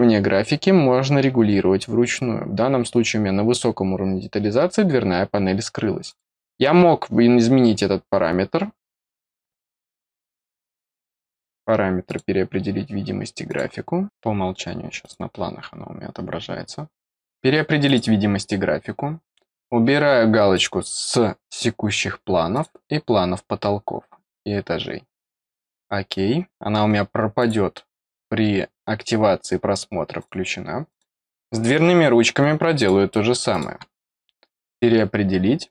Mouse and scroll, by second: 6.0 click, 9.5 click, 12.0 click, 13.4 click, 15.0 click, 17.8 click, 20.5 click, 22.5 click, 25.0 click, 27.3 click, 30.1 click, 30.8 click, 32.7 click, 33.5 click, 34.6 click.